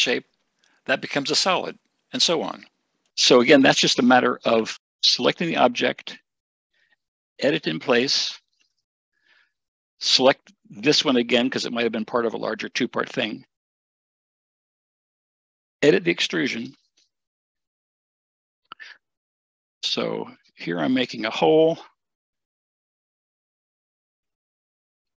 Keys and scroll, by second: 24.0 Escape.